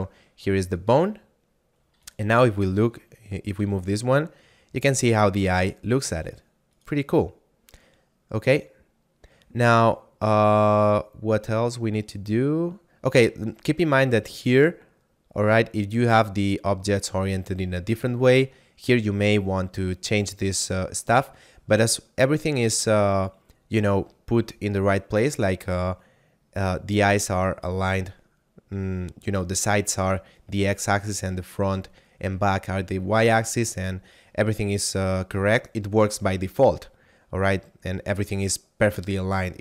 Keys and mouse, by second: 0.7 click, 2.0 right click, 3.6 g, 6.7 right click, 9.7 right click.